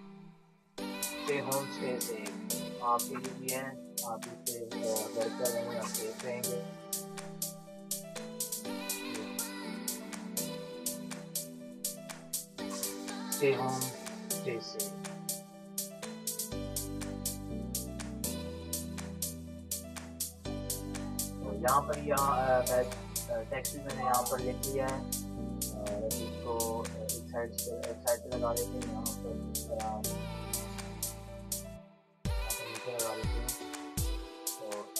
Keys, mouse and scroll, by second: 0.0-0.2 typing, 1.0 ctrl+Return, 1.6 ctrl+t, 2.5 shift+click, 3.5-4.9 drag, 4.9 Return, 5.4 ctrl+-, 5.7 ctrl+space, 5.9 click, 7.5-9.7 typing, 10.9-12.4 typing, 12.5 ctrl+Return, 13.3 ctrl+t, 14.1-21.3 drag, 21.8 ctrl+-, 22.3 click, 22.4 click, 23.3 ctrl+v, 23.7-28.8 drag, 28.8 t, 29.8 shift+click, 30.6-33.3 drag, 33.3 shift+click, 33.9 click, 34.8 Return.